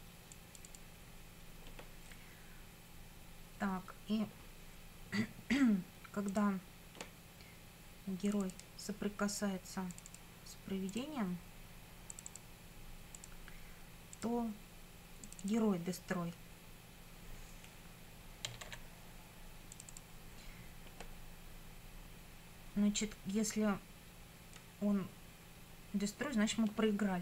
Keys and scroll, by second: 18.3-19.1 typing.